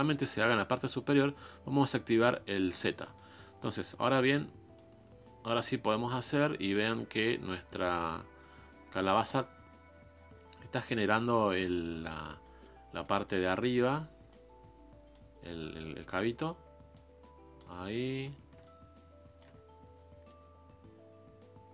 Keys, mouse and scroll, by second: 2.0 click, 2.9 middle click, 3.3 scroll up 3, 3.6 middle click, 4.1 middle click, 4.7-7.8 drag, 12.2 scroll down 4, 12.4 middle click, 12.8-13.5 scroll up 5, 13.0 middle click, 13.8 click, 14.5-15.1 scroll down 2, 15.1-19.5 drag, 19.5-19.9 scroll down 2, 19.9 scroll up 2, 20.2-21.7 drag.